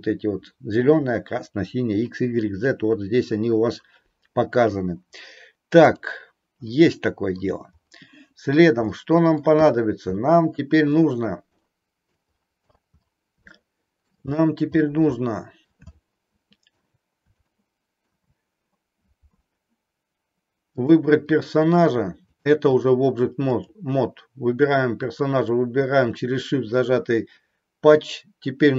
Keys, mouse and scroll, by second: 5.9 click, 6.7 middle click, 9.0 middle click, 10.2 middle click, 11.6 middle click, 13.5 middle click, 15.1 middle click, 15.6 scroll down 1, 15.9 scroll up 1, 16.0 middle click, 17.4 middle click, 20.7 click, 22.4 click, 23.5 click.